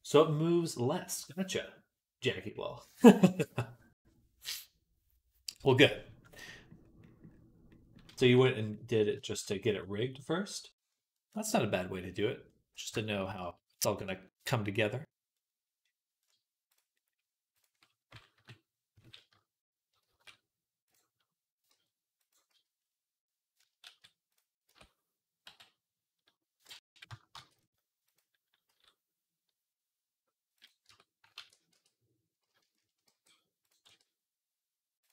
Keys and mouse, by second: 16.5 click, 16.5 middle click, 18.2 KP_3, 19.9 shift+d, 21.5 g, 22.3 z, 23.0-25.3 drag, 23.7 shift+s, 24.5 Tab, 25.3 x, 27.2 shift+a, 28.5 s, 30.3-32.4 drag, 30.7 Tab, 31.2 ctrl+a, 32.4 shift+right click, 32.9-34.2 drag, 32.9 g, 33.7 r.